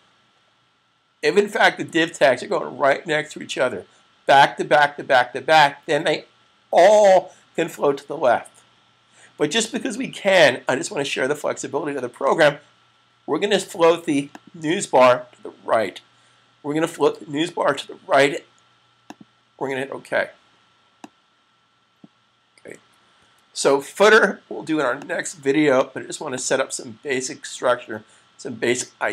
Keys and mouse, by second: 1.1 click, 12.1 click, 18.7 click, 23.1 super+s, 24.8 click.